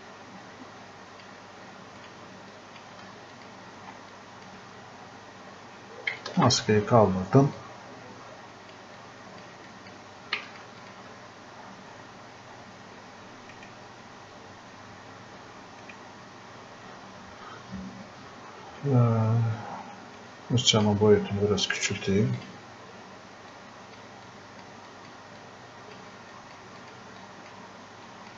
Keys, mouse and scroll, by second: 11.7 scroll up 1, 13.6 right click, 15.9 right click, 18.7-19.4 typing, 20.2 click.